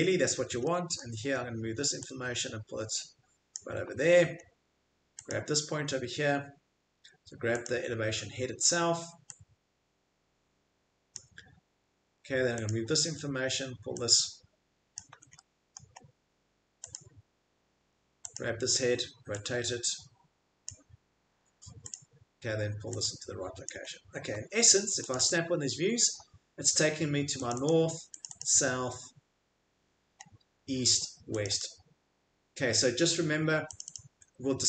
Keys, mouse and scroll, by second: 0.9 middle click, 3.5 click, 3.8 Escape, 4.4-4.9 middle click, 5.2 click, 6.8 Escape, 7.7 click, 8.0 middle click, 8.2 middle click, 11.1 click, 12.0 Escape, 12.7 click, 13.1 middle click, 13.2 middle click, 14.9 click, 15.1 Escape, 15.7 middle click, 16.0 middle click, 16.0 middle click, 16.9 click, 17.8 Escape, 18.3 click, 20.6 click, 21.3 Escape, 21.9 click, 23.6 click, 23.8 middle click, 23.9 middle click, 24.3 Escape, 25.1 click, 25.3 click, 27.5 click, 27.6 click, 28.2 click, 28.2 right click, 28.2 scroll, 28.3 click, 29.8-31.3 scroll, 31.4 click, 31.4 middle click, 31.6 click, 33.8 click, 33.9 click.